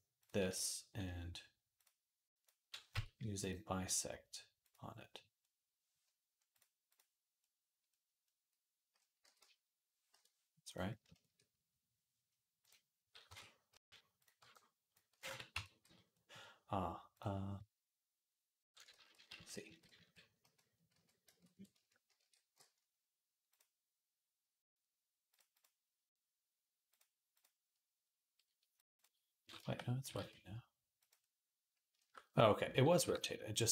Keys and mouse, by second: 0.0 click, 2.3-3.3 drag, 3.3-6.3 middle drag, 6.3-10.6 drag, 9.1 g, 10.6-12.4 middle drag, 12.4 click, 12.6-16.9 middle drag, 13.1 Tab, 13.5 z, 14.2 b, 15.0 x, 15.4 Tab, 15.7 z, 16.9-18.7 drag, 18.7-23.3 ctrl+middle drag, 18.8 ctrl+z, 19.0 ctrl+z, 19.2 ctrl+z, 19.5 ctrl+z, 19.8 ctrl+z, 20.2 ctrl+z, 20.8 ctrl+z, 21.1 ctrl+z, 22.0 shift+d, 23.3 click, 23.4-25.1 middle drag, 25.1 click, 25.2-26.9 middle drag, 26.9-28.7 drag, 28.7-31.7 middle drag, 29.8 g, 31.7 shift+click, 31.9-33.7 middle drag, 32.7 g.